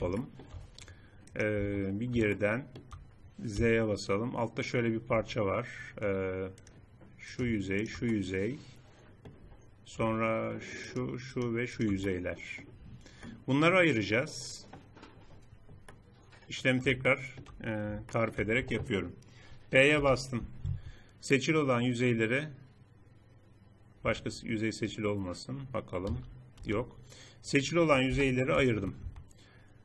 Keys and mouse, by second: 1.6 Tab, 3.5 z, 5.1 z, 8.0-10.0 middle drag, 10.0-13.2 drag, 13.6 middle click, 14.4 click, 14.6 middle click, 15.8 click, 16.4 middle click, 17.2 middle click, 18.1 middle click, 22.0 p, 24.3 middle click, 26.0 middle click, 26.6 z, 28.0 p, 29.0 Tab.